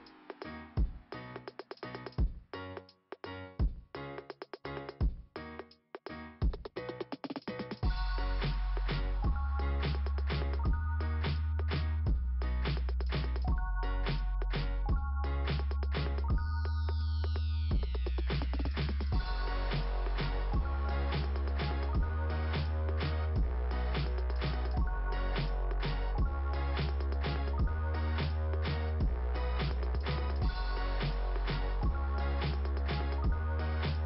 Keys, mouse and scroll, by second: 0.8 click, 1.0-2.6 typing, 3.7 Return, 4.6 Return, 5.0 Return, 5.5 right click, 5.8 right click, 6.1 right click, 6.5 right click, 6.8 right click, 7.1 right click, 7.4 right click, 8.6 right click, 9.3 click, 13.0 click, 17.9 click, 18.2 click, 20.0 click, 22.5-23.2 scroll down 1, 24.0 click, 25.5 click, 31.0 click, 31.3 click.